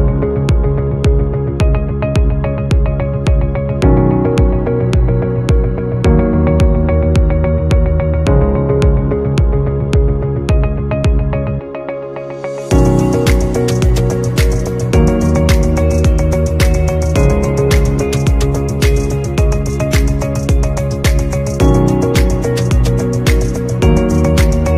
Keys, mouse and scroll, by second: 0.1 alt+scroll up 1, 0.8 shift+click, 1.3 shift+scroll, 4.9 right click, 7.2 alt+scroll up 1, 8.8 double click, 10.5 shift+click, 13.8 shift+click, 16.5 right click.